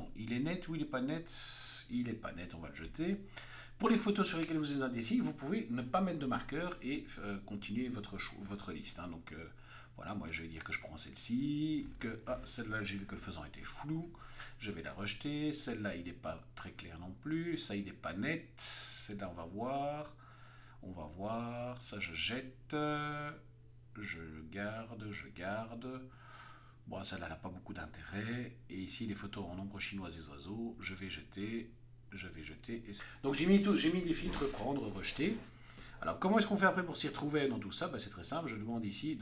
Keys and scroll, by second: 2.4 x, 3.0 Right, 6.8 Right, 9.3 p, 10.4 Right, 12.2 Left, 13.6 x, 14.1 Right, 15.7 x, 16.1 Right, 17.6 x, 18.0 Right, 20.2 Right, 21.6 x, 22.0 Right, 23.9 Right, 27.2 x, 27.8 Right, 28.5 Right, 29.1 Left, 30.4 x, 30.8 Right, 31.8 x, 32.1 Left.